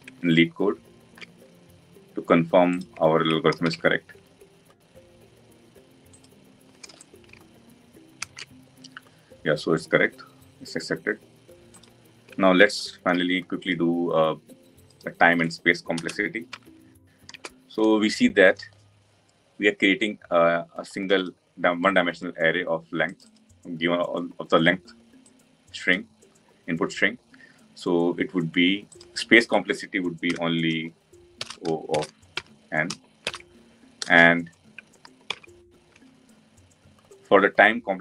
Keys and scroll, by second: 35.3 ctrl+d.